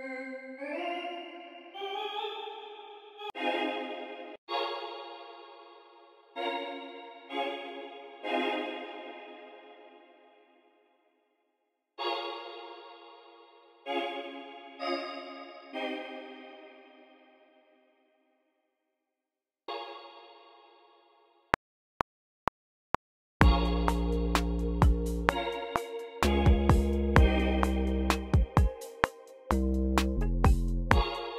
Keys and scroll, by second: 2.9 alt+Down, 4.2-5.0 typing, 9.8 super+z, 11.7 typing, 15.4 super+a, 17.3-19.0 typing, 21.4 r.